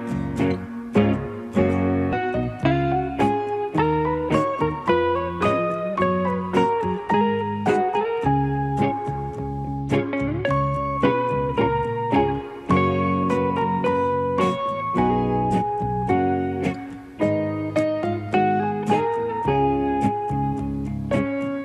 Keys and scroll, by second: 10.7 ctrl+shift+e.